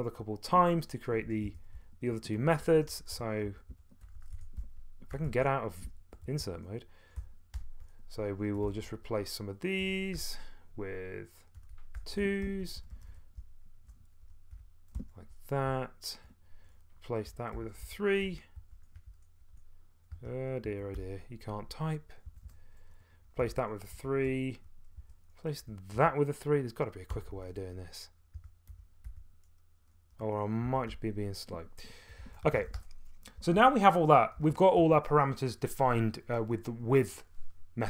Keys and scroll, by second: 0.0-10.3 typing, 5.3 Escape, 11.3-29.2 typing, 20.2 Escape, 30.6-34.9 typing.